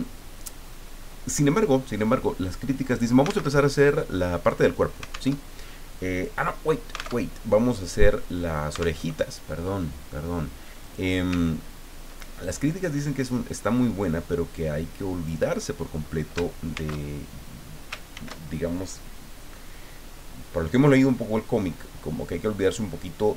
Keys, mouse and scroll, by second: 3.6 alt+Tab, 5.3 alt+Tab, 7.2 alt+Tab, 9.0 alt+Tab, 10.8 click, 11.5-12.0 ctrl+scroll up 2, 12.7-15.5 drag, 16.7 ctrl+shift+c, 18.1 ctrl+shift+f, 22.6 click.